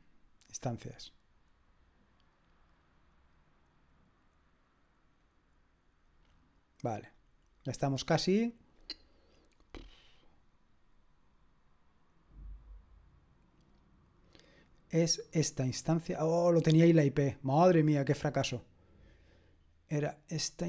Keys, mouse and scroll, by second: 0.7 click, 5.2 click, 15.2 click, 19.5-20.5 scroll down 1.